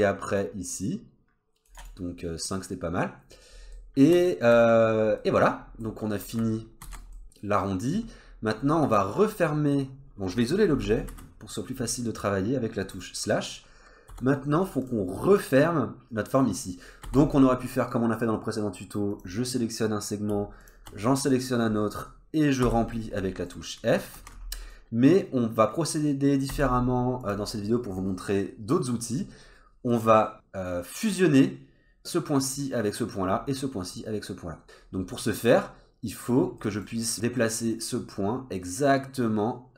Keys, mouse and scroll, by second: 0.4 click, 3.4-3.8 scroll down 2, 3.8 middle click, 5.2 middle click, 5.6 scroll down 1, 6.2 Tab, 6.8 alt+z, 7.2 middle click, 7.9-8.3 scroll down 2, 8.3-8.8 scroll up 3, 8.8 Tab, 9.1-11.1 scroll up 1, 11.1 /, 12.3 scroll up 1, 13.3-14.1 scroll up 2, 14.1 1, 14.3 scroll up 1, 14.8 click, 15.2 middle click, 16.0-17.0 scroll down 1, 17.0 scroll down 1, 17.0 2, 19.1 click, 20.6 shift+click, 22.6 f, 23.2 middle click, 24.2 ctrl+z, 24.5 middle click, 26.5 1, 27.2 click, 29.4-29.9 scroll up 2, 29.9 middle click, 34.8-35.2 scroll up 2, 35.2 middle click, 36.6 middle click, 37.1 scroll up 1, 37.4 middle click.